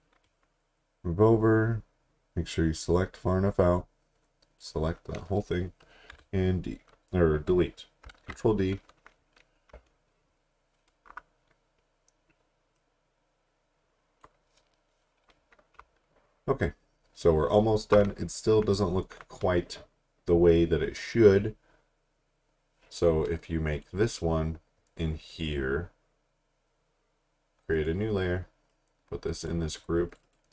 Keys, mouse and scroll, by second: 2.8 click, 6.1 Delete, 8.1 ctrl+d, 9.8 alt+scroll down 1, 11.2-12.8 scroll down 1, 12.8 click, 16.0 alt+scroll down 1, 16.8 alt+scroll up 2, 18.1-19.2 scroll down 1, 23.7 click, 24.2-24.5 scroll down 1, 24.6-25.7 scroll up 1, 25.7-26.1 scroll down 1, 26.1-27.7 scroll up 1, 27.7 click.